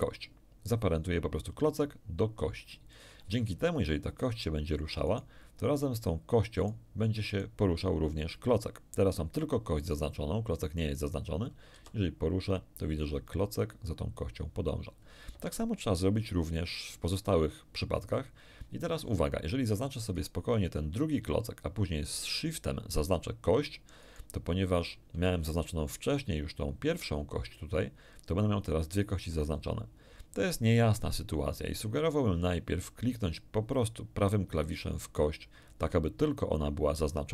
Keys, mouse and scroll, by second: 2.9 click, 5.0 right click, 6.5 right click, 7.3 right click, 11.7 r, 15.3 Escape, 20.1 right click, 24.0 shift+right click, 34.9 right click.